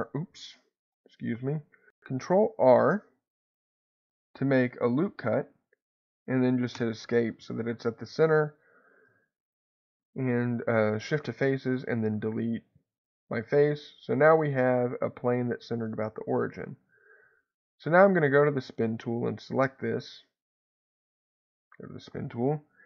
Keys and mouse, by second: 0.9 ctrl+z, 2.1 ctrl+r, 6.8 Escape, 9.1 3, 11.7 x, 17.7 click, 19.4 middle click, 21.1 click.